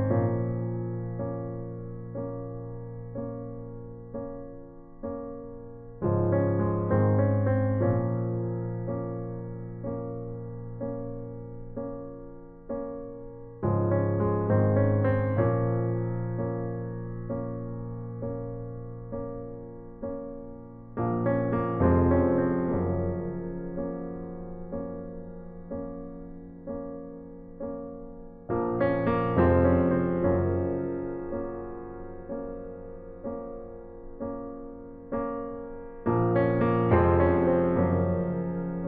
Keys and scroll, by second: 31.6 ], 32.3 [, 38.6-38.8 typing.